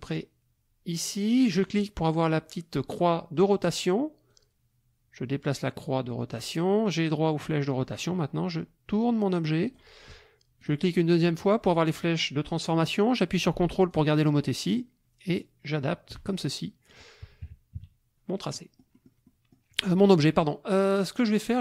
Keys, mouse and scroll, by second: 1.6 click, 4.3-6.5 drag, 7.8-9.9 drag, 10.6 click, 13.9-16.3 ctrl+drag, 16.9 click, 17.4 KP_Subtract, 18.5-19.7 drag.